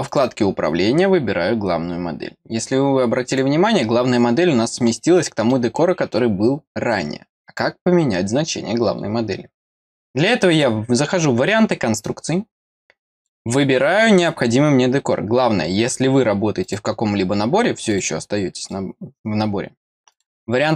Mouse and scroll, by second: 0.0 click, 3.3 click, 4.1 middle click, 5.1 middle click, 13.1 click, 16.6 click, 17.9 click, 18.6 click, 20.1 click.